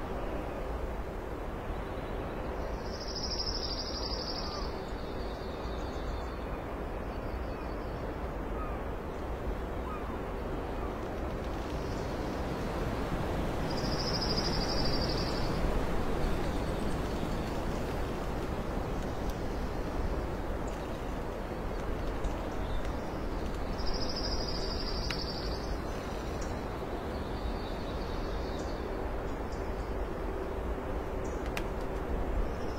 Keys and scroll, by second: 0.0 ctrl+s, 2.4 ctrl+s, 2.9 d, 2.9 x, 4.4 ctrl+z, 4.7 ctrl+space, 5.6 ctrl+space, 6.2 ctrl+z, 6.3 ctrl+space, 6.8 alt+space, 7.7 alt+space, 7.9 Delete, 7.9 z, 8.8 ctrl+alt+z, 9.1 ctrl+alt+z, 9.7 alt+space, 10.2 ctrl+alt+z, 11.5 ctrl+z, 11.5 ctrl+space, 12.3 ctrl+z, 13.1 ctrl+alt+z, 14.8 alt+space, 16.8 alt+space, 18.3 alt+space, 22.5 alt+space, 25.8 alt+space, 28.7 alt+x, 29.6 space, 31.1 alt+space, 31.8 ctrl+s, 32.0 ctrl+alt+space.